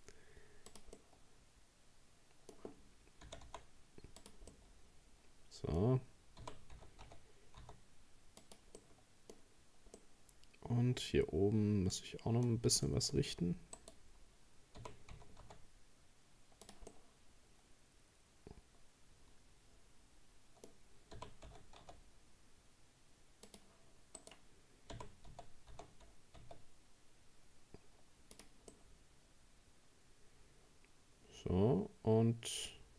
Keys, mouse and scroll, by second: 1.0-3.3 middle drag, 3.3 g, 4.5-6.4 middle drag, 6.4 g, 8.8-12.5 middle drag, 12.5-12.9 scroll up 1, 12.9 shift+middle click, 13.8 right click, 14.8 g, 16.9-19.9 middle drag, 21.2 g, 24.2 right click, 24.9 g, 28.7-31.7 middle drag.